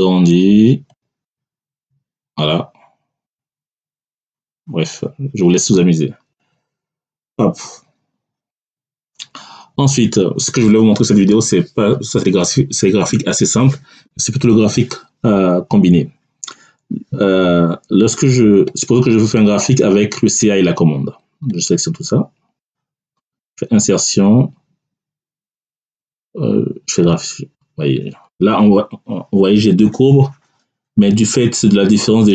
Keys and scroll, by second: 7.5 Delete.